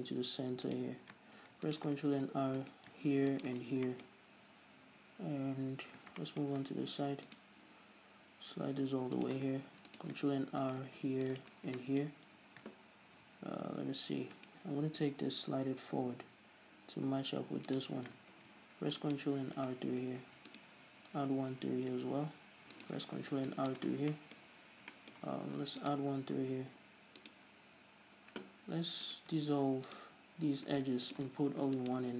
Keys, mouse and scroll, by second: 1.1 click, 1.7 ctrl+r, 3.0 right click, 3.4 ctrl+r, 3.9 right click, 4.2-9.6 shift+middle drag, 7.2 ctrl+r, 9.6 click, 10.0 ctrl+r, 11.1 right click, 11.3 ctrl+r, 11.8 click, 12.1-14.7 shift+middle drag, 14.7 alt+right click, 15.2 g, 18.1 click, 18.6 ctrl+r, 20.0 right click, 20.5 ctrl+r, 23.2 click, 23.5 ctrl+r, 24.1 right click, 24.5-27.6 shift+middle drag, 25.8 ctrl+r, 27.6 shift+click, 29.4 alt+right click, 29.7 x, 31.0 alt+right click, 31.3 x, 31.8 ctrl+r.